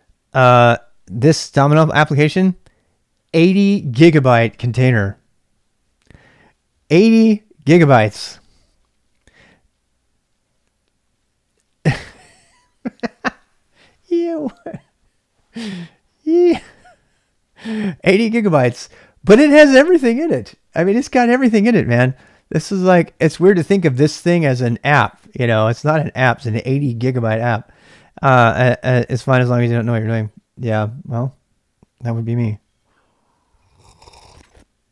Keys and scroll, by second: 26.5 typing.